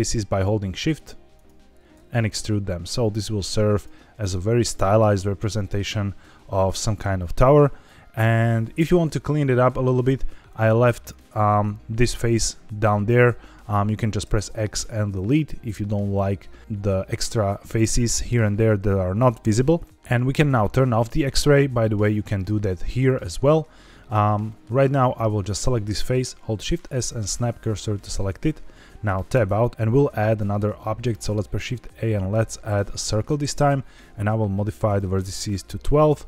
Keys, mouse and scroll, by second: 0.2 shift+click, 0.9 shift+click, 1.3 shift+click, 1.9 e, 3.7 click, 4.0 middle click, 5.3 middle click, 9.0 z, 10.4 click, 11.1 click, 12.0-13.6 middle drag, 14.2 x, 19.8 middle click, 20.7 z, 22.3 click, 22.8 click, 24.4 middle click, 25.0 click, 25.7 middle click, 26.4 shift+s, 29.3 Tab, 30.9 shift+a, 34.8-36.2 drag.